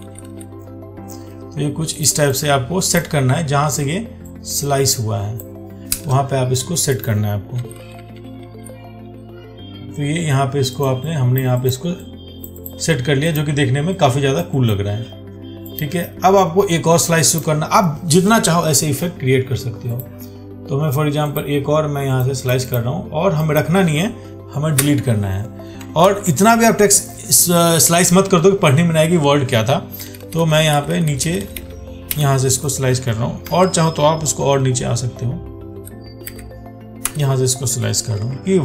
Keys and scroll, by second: 3.9 ctrl+t, 26.3 ctrl+z, 33.7 ctrl+z, 38.4 ctrl+d.